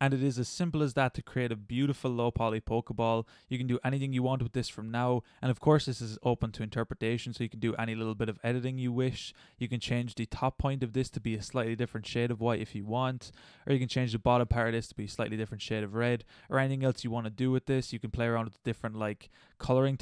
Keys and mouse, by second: 6.0-7.9 middle drag, 8.6-13.7 middle drag, 15.2 middle drag, 15.9-20.0 middle drag.